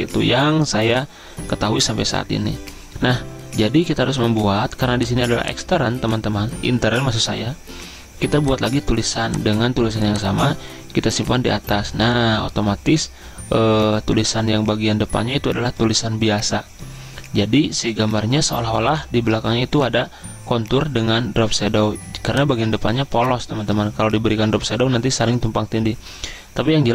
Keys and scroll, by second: 23.6 ctrl+z.